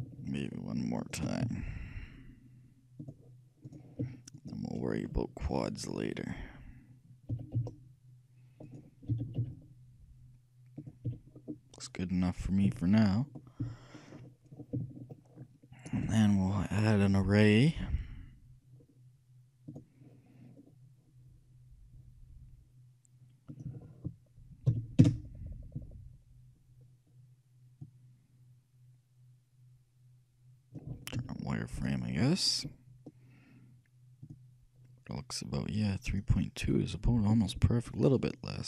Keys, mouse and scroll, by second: 1.5 shift+w, 3.7-6.3 right drag, 7.5 s, 9.2 g, 11.1 a, 11.5-15.7 middle drag, 12.7 a, 13.7 f, 17.2-18.9 shift+drag, 23.6-25.4 drag, 27.9-29.6 drag, 29.7 click, 31.2 z, 34.4-38.6 drag.